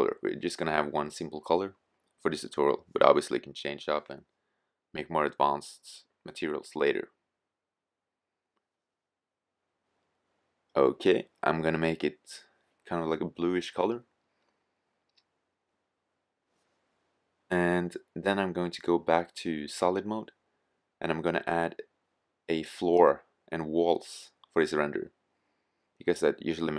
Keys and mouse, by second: 0.3-25.4 middle drag.